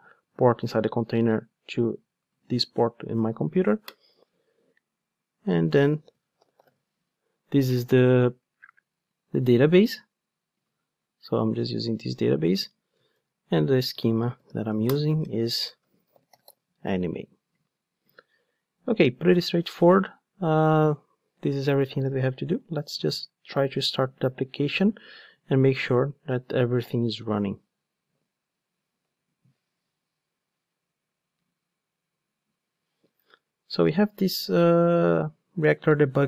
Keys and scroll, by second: 3.6 ctrl+Tab, 26.8 ctrl+d.